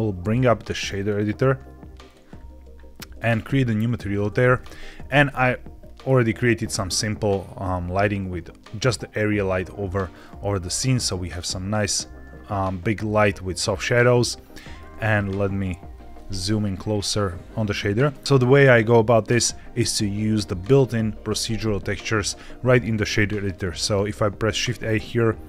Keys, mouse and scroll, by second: 0.0 click, 0.8-2.0 drag, 3.0 click, 4.3 shift+middle click, 4.6 z, 5.7-6.8 scroll down 2, 7.5-10.0 scroll down 2, 10.0 scroll down 1, 10.7 scroll up 1, 10.7-13.2 scroll down 1, 14.5 middle click, 14.9-16.1 ctrl+scroll up 4, 16.1 middle click, 16.6-17.1 scroll up 2, 17.1 middle click, 19.7 click, 23.3 click, 24.0 shift+a.